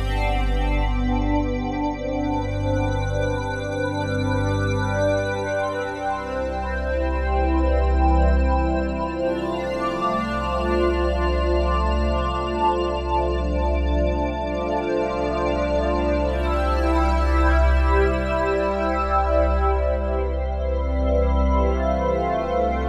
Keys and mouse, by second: 0.2 1, 0.7 ctrl+alt+click, 1.3 shift+click, 2.1 shift+click, 3.2 shift+click, 4.3 shift+click, 4.8 shift+click, 7.1 alt+p, 8.4 Down, 8.7 Return, 10.7 ctrl+a, 11.5-17.1 ctrl+drag, 19.5 click.